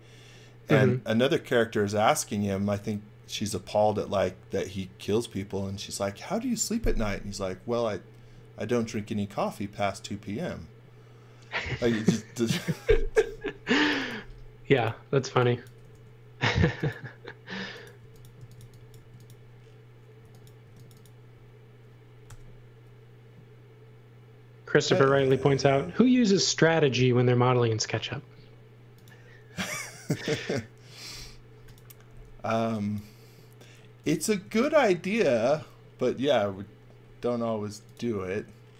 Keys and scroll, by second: 13.6 space, 15.3 x, 15.9 s, 18.0-19.1 typing, 20.2 x, 20.6 space, 22.3 l, 24.7 space, 26.7 l, 32.1 e, 34.3 space, 37.0 m.